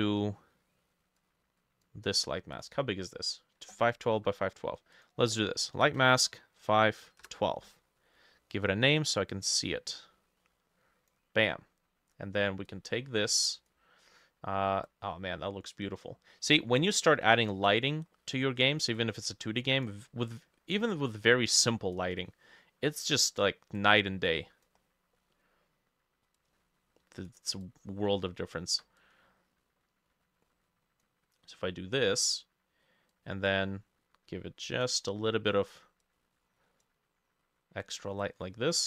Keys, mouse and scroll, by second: 2.7 double click, 4.2 F2, 5.8 Left, 6.4-7.5 typing, 17.9-18.5 scroll down 6, 22.1 scroll down 2, 22.3 middle click, 22.6-24.9 scroll up 5, 23.0 middle click, 24.9-25.2 scroll down 2, 25.2 middle click, 27.7 ctrl+click.